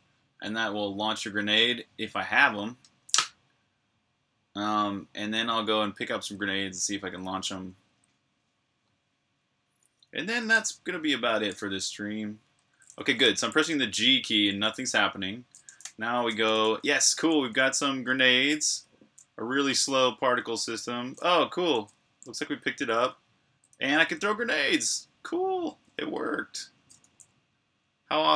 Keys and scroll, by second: 10.3-11.2 typing, 12.3-16.3 typing, 23.5-25.5 typing, 28.0-28.3 typing.